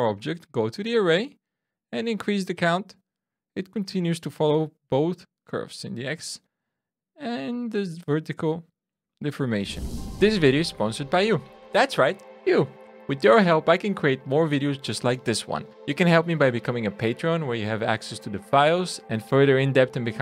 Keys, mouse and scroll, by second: 0.8 click, 2.1 click, 3.2-4.0 scroll down 1, 4.0 middle click, 4.0 scroll down 1, 7.9-8.4 scroll down 1, 8.4-9.0 scroll down 1, 9.3 shift+middle click.